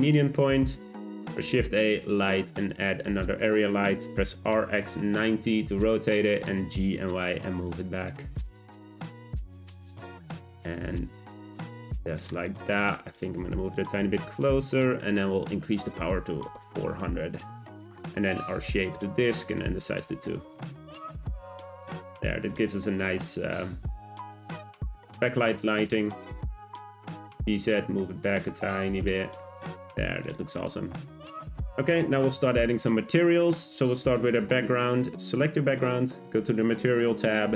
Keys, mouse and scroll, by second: 1.0 shift+a, 4.0 r, 6.1 scroll down 2, 6.4 g, 8.1-10.2 middle drag, 10.2 `, 11.2 click, 11.8-13.1 middle drag, 13.1 click, 14.0 g, 15.6 click, 16.5 0, 18.1-20.6 drag, 20.8 `, 26.8 g, 30.2 click, 31.2 scroll up 1, 35.2 click, 37.2 click.